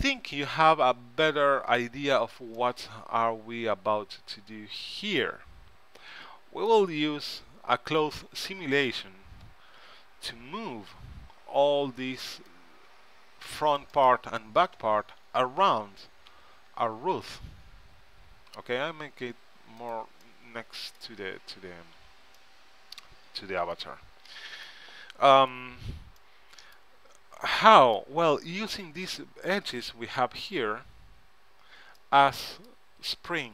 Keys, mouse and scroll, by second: 0.6-4.6 middle drag, 7.4 KP_3, 8.1 KP_1, 9.9 a, 11.1 z, 12.2 c, 14.9 g, 20.6 middle click, 22.2 z, 24.2-32.4 middle drag.